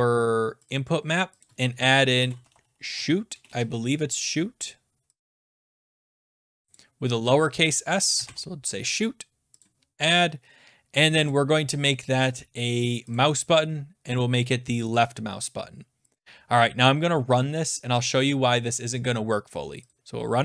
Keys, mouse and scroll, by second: 0.7 click, 1.4 click, 1.9-4.0 typing, 6.2-7.2 typing, 6.7 click, 7.5 click, 8.2 Delete, 9.6 click, 11.3 click, 13.1 click, 14.9 click, 16.1 click, 19.9 click.